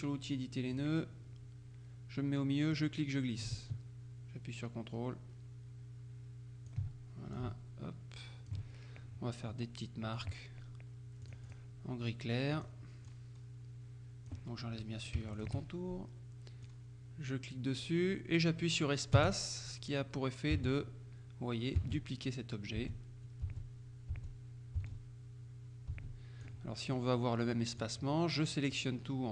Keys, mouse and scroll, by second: 0.8 click, 2.8-7.3 drag, 7.4-9.1 ctrl+drag, 10.2 click, 11.3 click, 12.6 click, 15.4 shift+click, 16.7-27.0 drag, 19.2 space, 20.6 space, 21.9 space, 22.9 space, 23.5 space, 26.0 space, 28.8-29.3 drag.